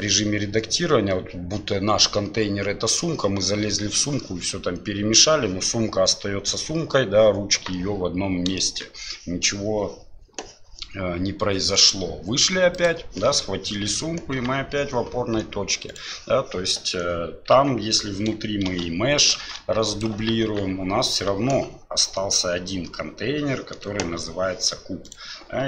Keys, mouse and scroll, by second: 8.6 shift+middle click, 11.8-12.8 drag, 14.4 g, 17.5 Tab, 18.7 shift+d, 19.4 shift+d, 20.4 Tab, 24.2 g.